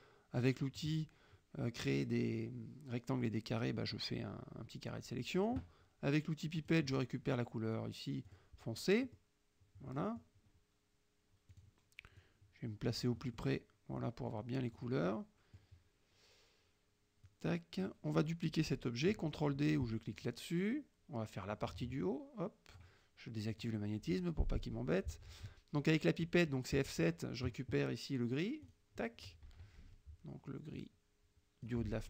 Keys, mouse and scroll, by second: 0.0-1.1 drag, 6.7 click, 8.4 click, 9.2 middle click, 9.8 click, 11.6 click, 12.3-13.7 drag, 13.7-14.8 middle drag, 14.8 click, 15.1-16.7 middle drag, 17.3-18.1 drag, 20.2 click, 21.6-23.0 drag, 23.6 click, 26.8 F7, 28.7 click, 29.9 F1, 30.8-31.9 drag.